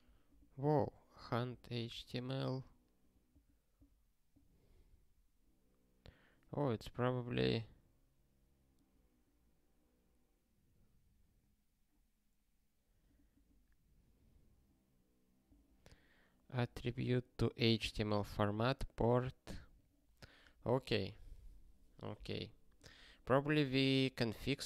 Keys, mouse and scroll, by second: 1.0 scroll down 1, 4.9 scroll down 1, 6.7 scroll down 1, 19.7 click, 20.7 click, 23.1 scroll up 1.